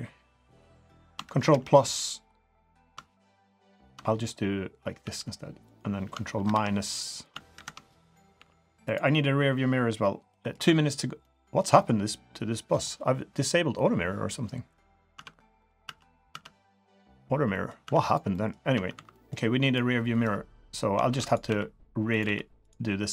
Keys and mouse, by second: 1.4 ctrl+KP_Add, 5.0 g, 6.4 ctrl+KP_Subtract, 7.5 ctrl+KP_Subtract, 8.3 g, 10.3 click, 10.6 3, 11.2 middle click, 15.0 middle click, 15.6 middle click, 15.8 Tab, 16.3 Tab, 17.5 drag, 17.8 Tab, 18.0 click, 18.3 click, 18.7 Tab, 18.9 3, 19.1 click, 19.6 click, 21.1 shift+d, 21.4 s, 22.2 g.